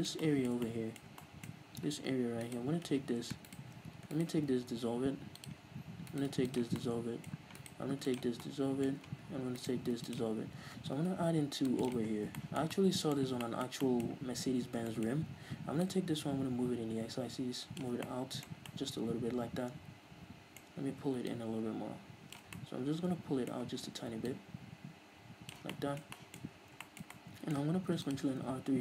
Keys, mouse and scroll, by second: 0.0 scroll up 2, 2.9-4.9 alt+right drag, 4.9 x, 6.5 alt+right click, 6.8 x, 7.3 middle click, 8.0 alt+right click, 8.4 x, 8.9-10.1 middle drag, 10.1 alt+right click, 10.4 x, 11.4 ctrl+r, 12.5 right click, 12.6 scroll down 1, 12.8-16.3 shift+middle drag, 15.0-15.3 scroll up 2, 16.3-18.5 drag, 18.4 scroll down 2, 18.5-21.8 middle drag, 19.0 scroll down 2, 21.1-21.8 scroll up 2, 21.8-23.0 drag, 23.0-24.7 middle drag, 24.7-26.2 drag, 26.2-28.8 middle drag, 26.9-27.3 scroll up 2, 28.4 ctrl+r.